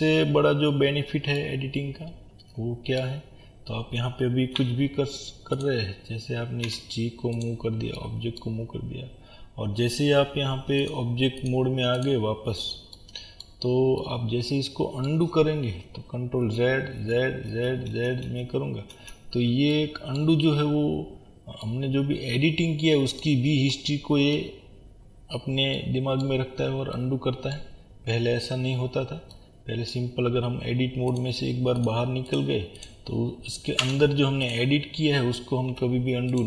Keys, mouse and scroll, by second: 0.7-1.4 scroll up 1, 4.6 1, 5.6 click, 6.7 g, 8.0-11.5 middle drag, 11.5-13.0 drag, 13.0-31.9 middle drag, 13.7-14.0 scroll down 1, 16.5 ctrl+z, 20.4 scroll up 1, 25.0-25.8 scroll down 1, 26.5-27.0 scroll down 1, 27.8 scroll up 1, 28.4-29.0 scroll down 2, 31.9-33.4 drag, 33.8 Tab, 34.5 click, 35.7 g.